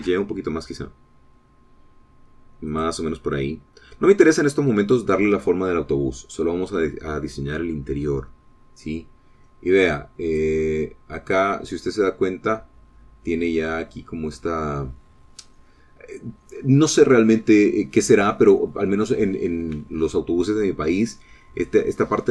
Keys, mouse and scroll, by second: 0.7 g, 0.9 y, 3.6 click, 4.1-5.4 middle drag, 8.7-10.0 middle drag, 10.9 click, 11.5 middle click, 11.6 click.